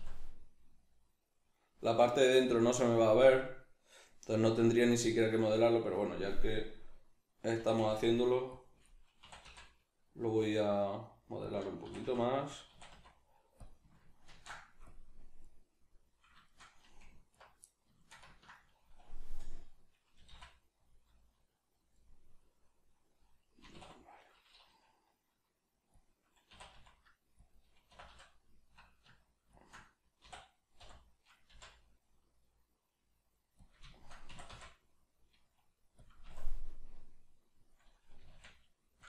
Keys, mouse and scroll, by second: 2.5-6.6 middle drag, 2.5 click, 8.6 click, 9.2 e, 11.5 click, 11.8 e, 12.6 click, 12.7 e, 13.6 click, 14.3 ctrl+f, 15.4-17.3 middle drag, 17.3 alt+right click, 17.6-20.9 middle drag, 20.2 g, 20.9 click, 22.0-26.0 middle drag, 23.6 e, 26.0 click, 26.5 e, 27.5 click, 27.9 e, 29.6 shift+click, 30.2 e, 33.7 click, 33.9-36.0 shift+middle drag, 34.3 e, 36.0 click, 36.2 s, 37.7 click, 38.1 g.